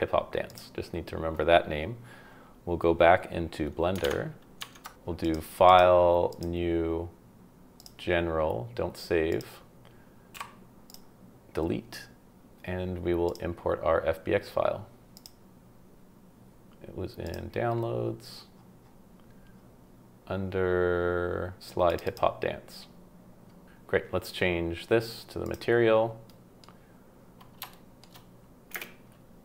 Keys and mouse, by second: 10.3 x, 13.4-15.3 drag, 25.5 click, 26.2-26.6 middle drag, 27.7-28.0 shift+middle drag, 28.7 space.